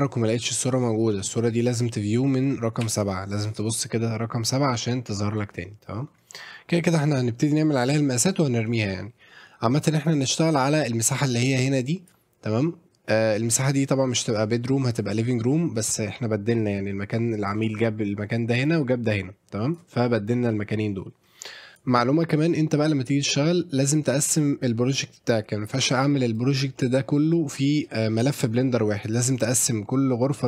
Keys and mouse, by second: 1.1 middle drag, 2.8 KP_7, 10.1 click, 10.8 click, 15.8 click, 21.7 click.